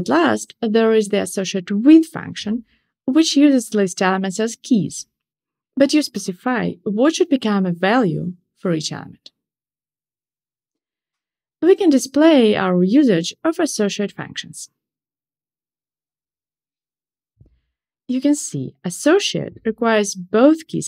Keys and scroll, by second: 0.3 Return, 8.0 shift+super+8, 10.6 Tab, 13.0 shift+super+8, 13.7 ctrl+shift+r.